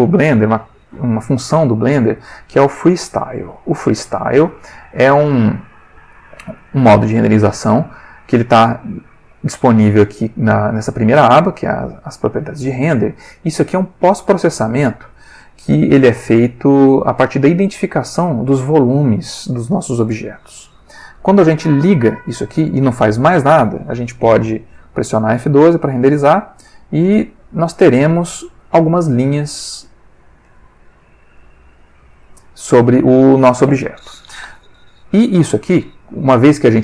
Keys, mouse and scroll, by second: 5.0 click, 6.6 click, 14.8 click, 22.3 click, 24.8 F12, 30.1 click, 34.8 click, 36.7 click.